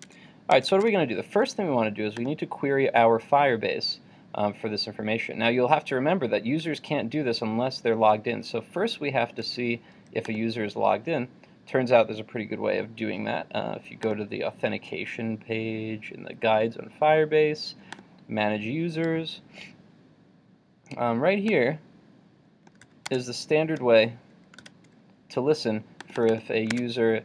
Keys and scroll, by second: 0.2 super+Tab, 22.9 super+c, 23.2 super+Tab, 24.6 super+v, 26.9 super+Tab.